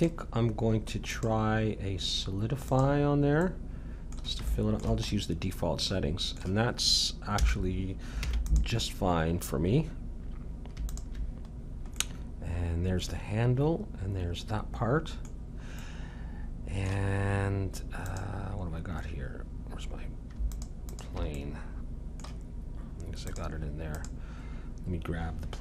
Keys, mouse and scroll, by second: 3.4-6.9 middle drag, 7.3 a, 8.2 ctrl+s, 11.4-13.2 drag, 13.2 middle click, 15.3-17.7 middle drag, 18.0-19.8 drag, 20.5-22.8 drag, 21.3-23.3 middle drag, 23.3-25.6 drag.